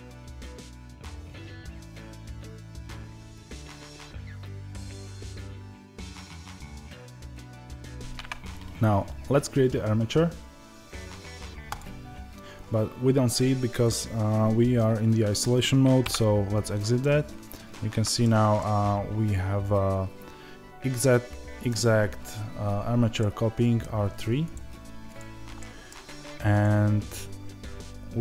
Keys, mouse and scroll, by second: 0.0-1.7 middle drag, 0.2 Tab, 1.5 Tab, 1.7 click, 1.8-2.8 middle drag, 2.0 e, 2.8 click, 3.1 ctrl+a, 3.4 click, 3.7 ctrl+a, 4.2-5.9 middle drag, 5.9 click, 6.1 g, 6.8-11.7 middle drag, 7.0 Tab, 7.6 Tab, 11.7-15.9 drag, 15.9 KP_Divide, 16.9-24.4 middle drag, 18.1-18.5 scroll down 2, 24.4 click, 25.5-26.5 middle drag, 26.5 click.